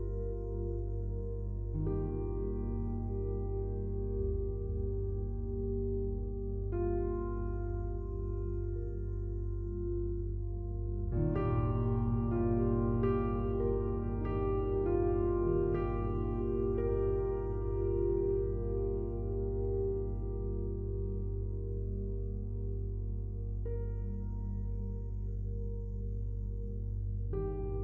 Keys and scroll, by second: 21.8 ctrl+z, 24.9 ctrl+z.